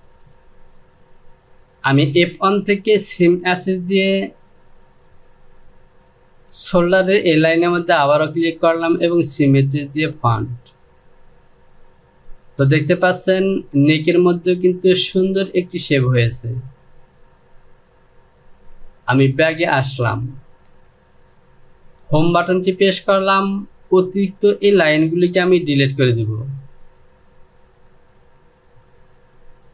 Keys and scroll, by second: 19.0 ctrl+z, 19.7 ctrl+z, 21.6 Home, 25.2 Delete.